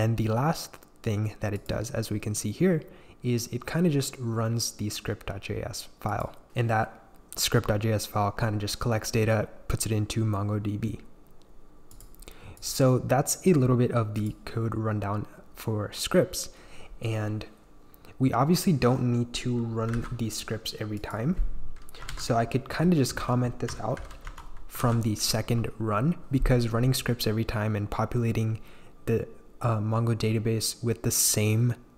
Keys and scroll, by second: 19.9 super+b, 21.8-23.6 typing, 23.9 super+/, 24.2 Escape, 24.8 super+s.